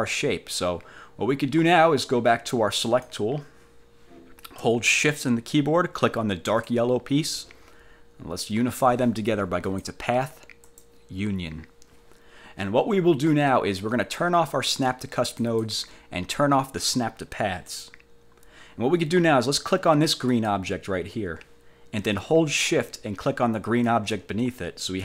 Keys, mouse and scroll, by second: 3.0 click, 6.6 shift+click, 9.8 click, 10.8 click, 15.5 click, 17.8 click, 20.4 click, 24.0 shift+click.